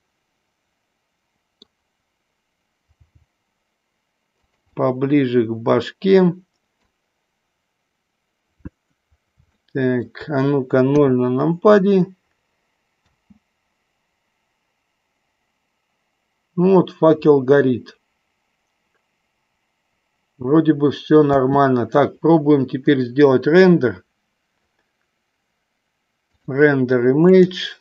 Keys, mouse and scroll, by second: 0.1-1.7 middle drag, 3.0 g, 4.6 click, 4.8-7.1 middle drag, 9.8 shift+middle click, 11.0 KP_0, 13.3 space, 21.6 space, 26.3-27.8 drag.